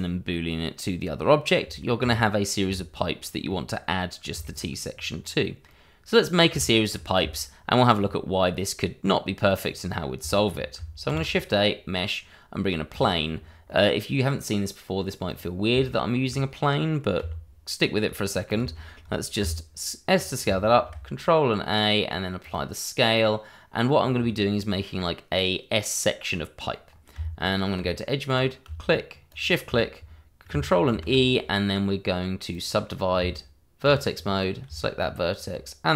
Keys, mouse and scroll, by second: 1.8 shift+middle click, 3.2 scroll up 1, 3.5 middle click, 4.4 shift+middle click, 4.9 scroll down 1, 6.2 middle click, 6.6 shift+middle click, 8.6 middle click, 11.1 shift+a, 12.9 click, 13.3-13.7 scroll down 1, 13.7 middle click, 15.3 click, 15.8 middle click, 17.2 g, 18.7 click, 18.8 middle click, 19.2 shift+middle click, 19.4 s, 20.1 click, 20.7 ctrl+a, 22.4 click, 23.2 middle click, 24.1-24.7 scroll up 1, 24.7 middle click, 26.8 scroll up 1, 27.1 Tab, 28.2 click, 29.3 shift+click, 30.9 ctrl+e, 32.5 click, 33.1 Tab, 35.0 shift+click, 35.0 click, 35.1 shift+click.